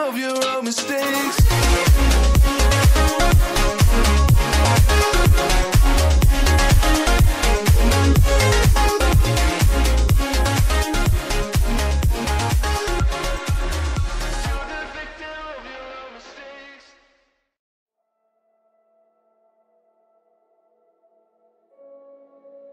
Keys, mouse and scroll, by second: 0.4 click, 5.1 click, 5.4 scroll down 1, 5.9 click, 6.2 double click, 7.9 click, 9.3 Up, 9.6 Up, 11.0 click, 11.1 double click, 11.4 scroll up 1, 12.6 click, 15.6 scroll down 1, 16.2 ctrl+z, 17.2 click, 17.5 scroll down 1, 17.9-18.5 scroll up 1, 18.9 click.